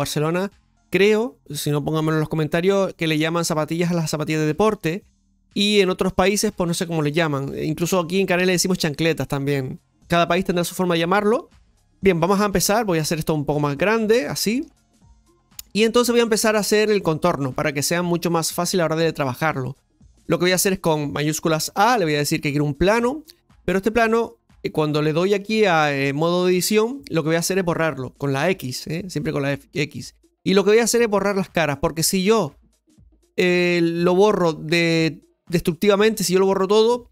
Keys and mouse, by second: 13.5-14.6 shift+middle drag, 25.2-29.8 drag.